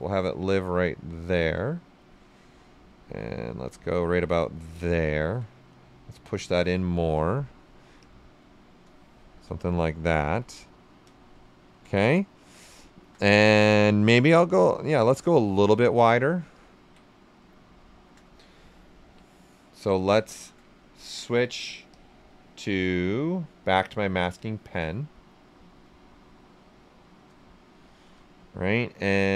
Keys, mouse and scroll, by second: 0.0-1.9 right drag, 1.9-4.7 drag, 4.7 alt+right click, 5.6 click, 6.9 shift+f, 8.0 click, 9.1 shift+f, 9.5-11.1 right drag, 11.1 q, 11.5 shift+f, 12.0 right click, 13.1-14.9 shift+right drag, 14.9-16.6 right drag, 16.6 ctrl+click, 17.6-21.9 right drag, 21.9 ctrl+click, 24.3 ctrl+click, 25.0-29.2 right drag, 29.2 ctrl+click.